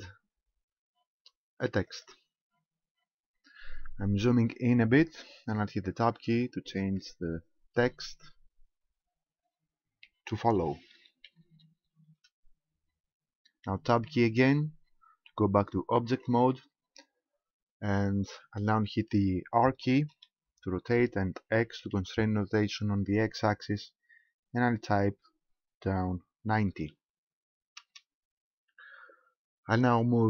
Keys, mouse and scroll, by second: 2.9-3.3 scroll up 4, 6.1 Tab, 7.8 BackSpace, 8.1 BackSpace, 8.4 BackSpace, 8.7 BackSpace, 10.6-12.1 typing, 16.0 Tab, 17.7-18.1 scroll down 2, 20.2 r.